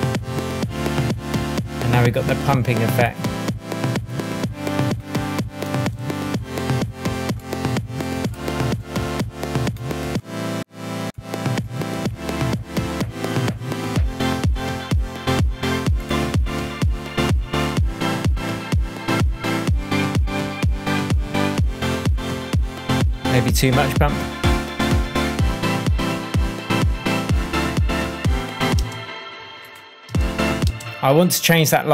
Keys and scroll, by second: 5.6 super+c, 28.7 space, 30.0 space.